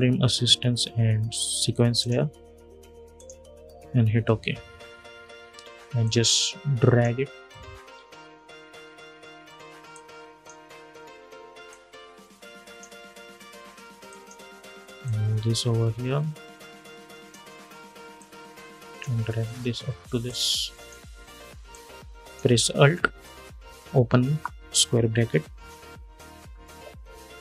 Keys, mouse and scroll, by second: 1.7 click, 4.7 typing, 5.7-7.3 drag, 7.8 scroll down 1, 9.6-25.2 drag, 25.2 alt+[, 26.3-27.3 scroll up 1, 27.3 click.